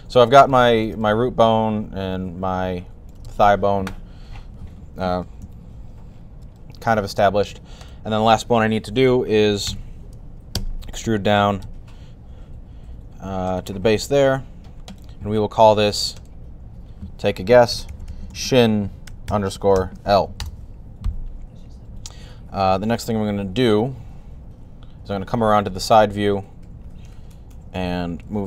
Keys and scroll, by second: 4.1 ., 5.3 1, 9.5 e, 17.3-19.5 typing, 24.8 3, 28.0 typing.